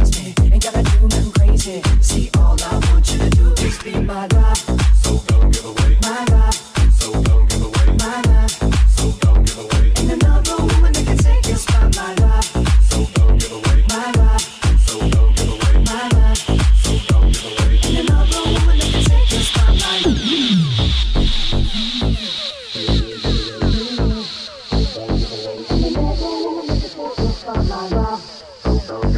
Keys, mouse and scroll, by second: 3.9 middle click, 3.9 right click, 6.7-7.7 middle drag, 7.9-9.2 shift+middle drag, 9.2 right click, 9.3-11.9 middle drag, 9.5 Tab, 11.0 ctrl+Tab, 11.0 s, 11.9 click, 12.0-15.5 middle drag, 15.5-22.9 drag, 18.2 ctrl+middle click, 19.7 Tab, 20.4 middle click, 20.4 right click, 21.7 middle click, 21.7 right click, 22.2 /, 22.9 Tab, 23.0 shift+click, 23.3 Tab, 23.3 /, 24.3 click, 24.3 middle click, 24.3 right click, 24.7-29.1 drag, 26.9 Tab.